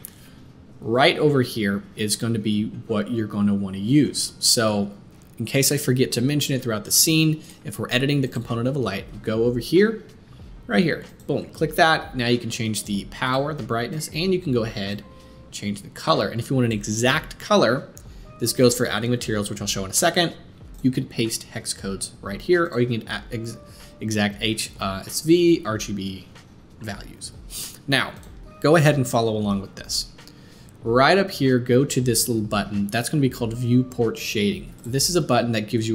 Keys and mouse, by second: 0.0-13.4 drag, 13.4 middle click, 13.9 click, 14.0-28.1 middle drag, 28.1-35.4 drag, 35.4-35.9 middle drag.